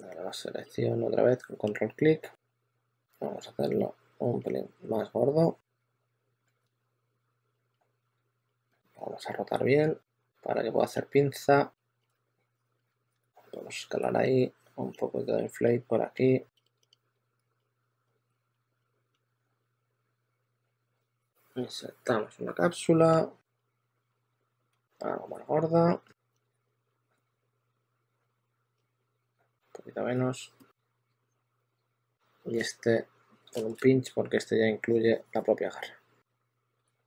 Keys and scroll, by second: 2.3 e, 5.8 w, 8.9 w, 10.7-13.1 typing, 16.9-19.5 typing, 24.3 w, 32.4 1, 33.4 shift+1, 34.2 s, 36.8 w.